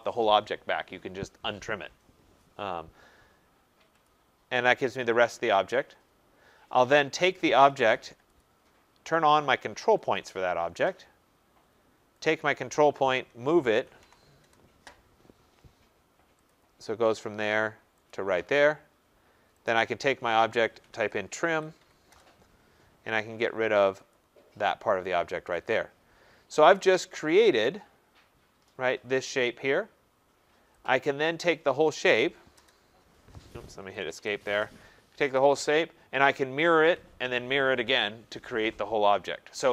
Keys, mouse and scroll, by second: 4.0-10.1 drag, 7.6 Return, 12.2 click, 13.0-14.5 typing, 16.5 click, 18.0 typing, 18.0 click, 19.6 click, 20.5-22.2 typing, 24.1 click, 24.9-25.6 scroll, 25.6 click, 26.1-26.7 scroll, 26.2 Return, 26.7 click, 26.7 scroll, 27.6 right click, 27.8 scroll, 30.8 click, 31.4 click, 32.5 Return, 33.7 Escape, 33.9 Escape, 34.1 Escape, 35.3 click, 39.2-39.7 drag.